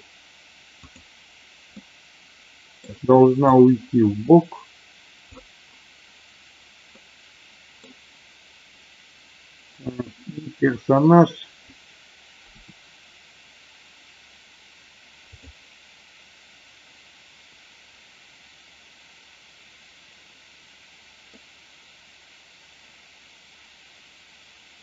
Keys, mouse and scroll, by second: 0.8 click, 1.8-2.8 middle drag, 3.5-5.3 drag, 6.9 scroll up 1, 7.0 middle click, 9.8 click, 12.5 r, 21.3-24.8 middle drag.